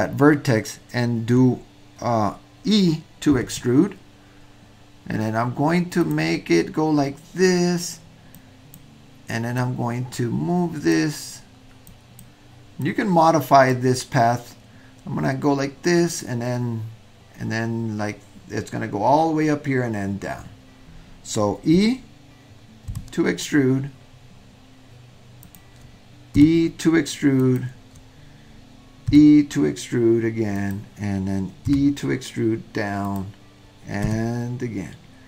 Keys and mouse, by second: 3.3 e, 8.4 click, 9.6-11.0 drag, 12.0 click, 12.9-13.9 drag, 22.9 e, 26.4 e, 29.1 e, 31.7 e, 34.0 e.